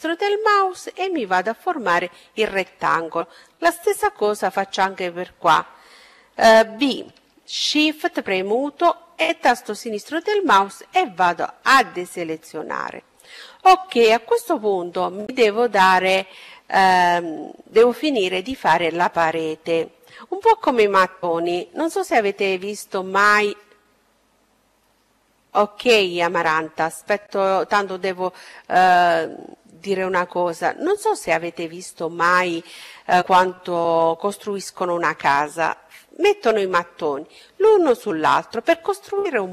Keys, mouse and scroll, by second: 3.2 b, 9.6-11.6 middle drag.